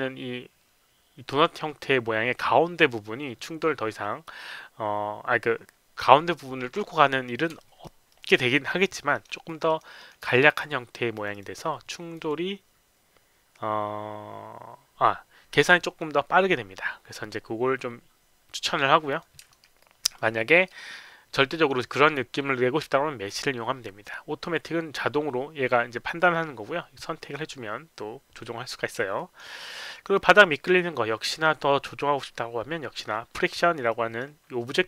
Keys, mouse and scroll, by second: 7.6 alt+right click, 8.1 alt+click, 8.5 alt+middle click, 8.8 alt+right click, 9.1 alt+middle click, 9.5 alt+click, 9.7 alt+right click, 10.0 alt+middle click, 11.1 click, 11.3 click, 12.1 click, 19.1 click, 19.5 alt+middle click, 19.8 alt+click, 20.2 alt+right click, 21.5 click, 29.2 alt+click, 29.6 alt+click, 29.9 alt+right click, 30.2 alt+middle click, 33.9 click.